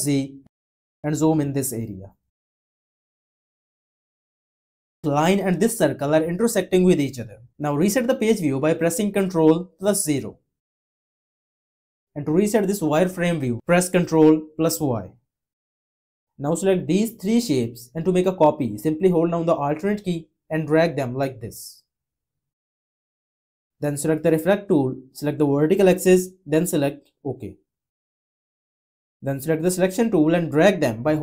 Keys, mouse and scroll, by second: 9.2 ctrl+0, 14.1 ctrl+y.